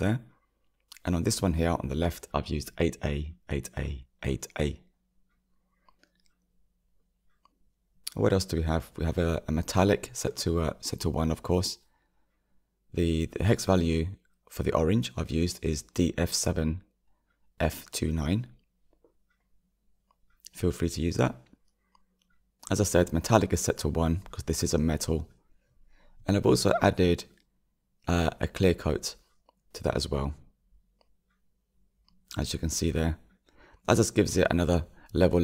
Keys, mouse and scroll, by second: 1.5 click, 4.8 click, 13.8-20.9 drag, 21.2-35.4 drag.